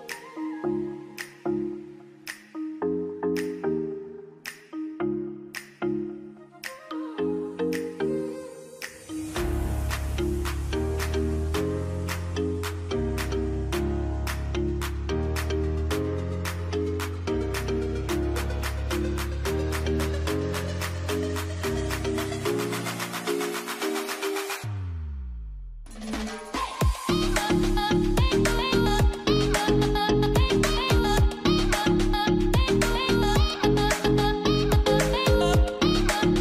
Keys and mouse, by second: 1.1 shift+middle click, 2.6 alt+a, 8.6-10.1 shift+middle drag, 10.1 k, 16.6-17.6 shift+middle drag, 20.5 k, 30.9 alt+a, 31.5-32.6 shift+middle drag.